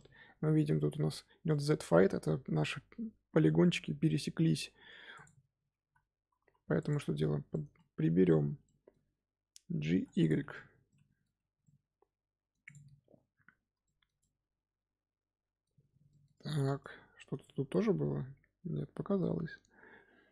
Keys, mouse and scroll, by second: 4.7 Tab, 5.1 click, 5.7 z, 6.7 click, 7.4-9.8 middle drag, 9.8 g, 10.5 scroll down 2, 10.8 middle click, 11.3 Tab, 11.6-12.6 middle drag, 12.6 click, 12.9-13.8 scroll down 3, 13.8-15.7 shift+middle drag, 15.7-16.0 scroll up 2, 16.0 shift+middle drag, 16.3-16.7 scroll up 4, 16.7 Tab, 17.0-17.4 scroll up 2, 17.4-20.3 middle drag.